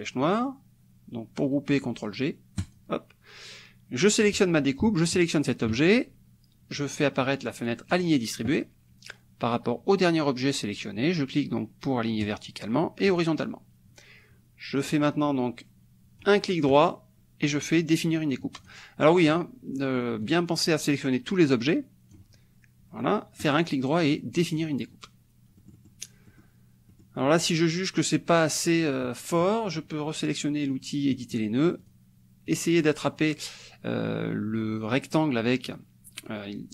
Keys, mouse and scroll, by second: 2.6 click, 4.0 click, 5.0 shift+click, 7.9 click, 12.2 click, 13.2 click, 14.9-16.4 drag, 16.7 right click, 18.7 click, 19.3 click, 20.2-22.3 drag, 23.4 right click, 24.5 click, 25.7 click, 26.4 click, 26.9 click, 27.2-31.1 middle drag, 31.1 click, 31.8 click, 32.5 click.